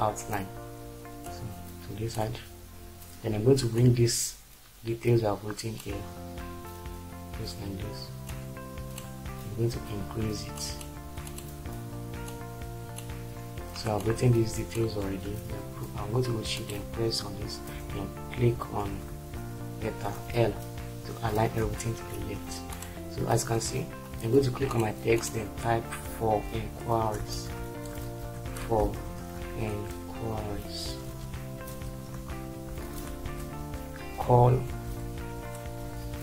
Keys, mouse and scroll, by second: 17.6 shift+c, 18.8 ctrl+z, 20.3 typing, 22.2 shift+F4, 27.0-32.1 typing, 33.2 shift+;, 33.7 Return, 34.5 c, 35.8 BackSpace.